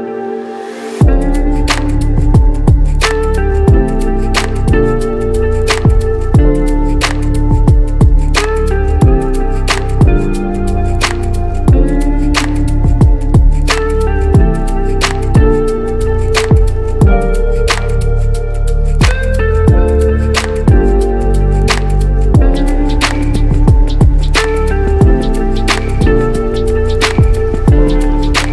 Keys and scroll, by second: 2.8 ctrl+j.